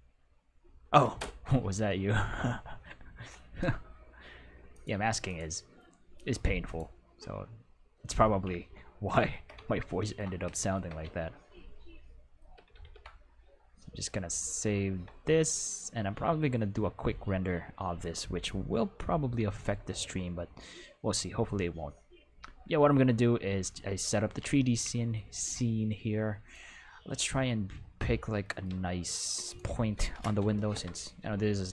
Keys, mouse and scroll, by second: 4.7 click, 5.2 click, 6.1 click, 6.6 click, 8.7-9.4 ctrl+middle drag, 9.7 ctrl+middle click, 10.5 shift+middle click, 11.1-12.3 ctrl+middle drag, 12.4 ctrl+s, 12.6 ctrl+s, 22.4 q, 28.6 q, 29.4 right click, 30.7 Home, 31.6 g.